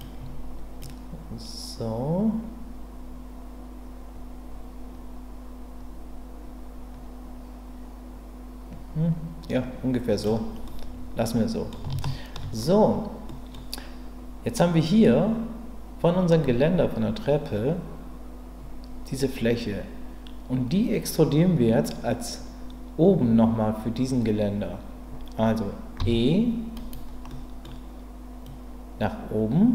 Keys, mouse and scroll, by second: 0.8-10.2 drag, 10.7-11.7 middle drag, 12.0 shift+middle click, 13.3 middle click, 26.0 e, 27.3 middle click, 28.5-29.7 drag.